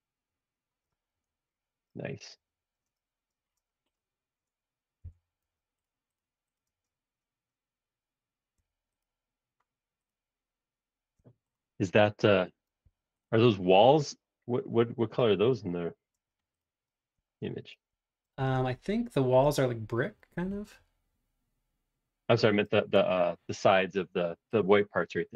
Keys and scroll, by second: 5.0 b, 6.7 space, 8.6 Escape, 13.0 super+x, 16.1 space, 16.2 o, 18.6 super+Tab, 22.9 super+Tab.